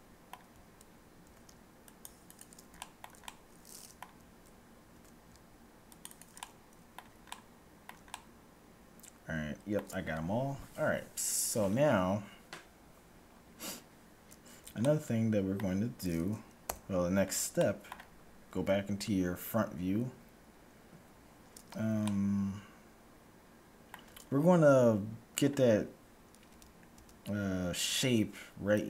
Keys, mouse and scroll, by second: 1.3 ctrl+r, 2.8-4.9 middle drag, 4.8 ctrl+r, 6.4-9.9 middle drag, 14.8-16.6 middle drag, 16.6 a, 17.6-19.4 middle drag, 18.4 KP_1, 21.9-23.8 middle drag, 24.4-27.3 middle drag, 26.6 z, 26.8 z.